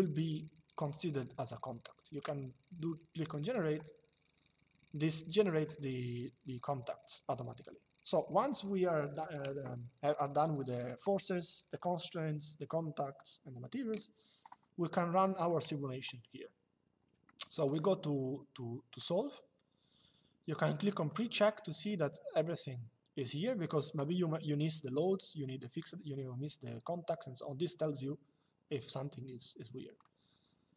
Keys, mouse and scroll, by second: 3.0 click, 17.0 shift+middle click, 18.7 click, 20.7 click, 29.7 click.